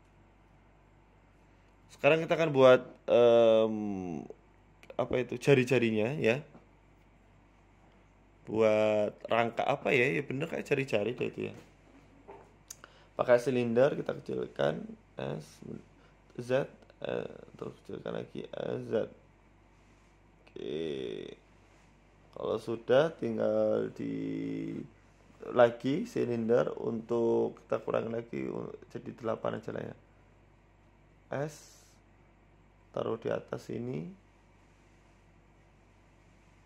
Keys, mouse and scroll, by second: 0.8-2.1 scroll down 4, 1.0 middle click, 2.1 KP_1, 2.4 scroll up 4, 2.6 shift+middle click, 3.0 Tab, 3.6 shift+middle click, 3.8 shift+a, 5.8 s, 7.6 middle click, 7.9 ctrl+z, 8.3 right click, 8.6 Tab, 9.2 shift+s, 10.3 KP_1, 10.6 Tab, 11.7 middle click, 12.6 KP_1, 12.8 Tab, 13.2 Tab, 13.4 shift+a, 14.9 s, 15.8-16.1 scroll up 4, 16.0-19.2 typing, 22.4 shift+middle click, 22.7 middle click, 23.4 scroll down 3, 23.7 KP_1, 24.2 scroll up 3, 24.4 middle click, 24.8 Tab, 25.9 scroll down 1, 26.2 scroll up 3, 26.4 shift+a, 29.1 click, 29.7 click, 30.9 Tab, 31.3 Tab, 32.1-32.7 scroll down 8, 32.5 s, 33.6-33.9 scroll up 4, 33.9 shift+middle click, 34.2 g, 35.0 s, 35.9 scroll up 3, 35.9 shift+middle click, 36.3 s.